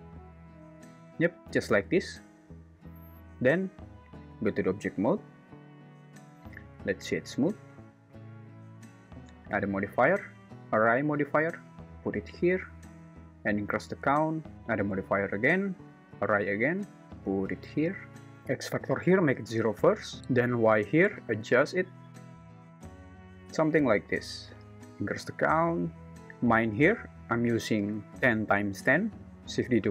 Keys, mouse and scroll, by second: 3.1 Tab, 6.6 right click, 9.4-10.8 drag, 11.8-12.7 drag, 13.9 click, 15.0-16.5 drag, 17.0-18.0 drag, 18.3-19.3 drag, 20.2 click, 21.3-23.1 shift+drag, 25.8 click.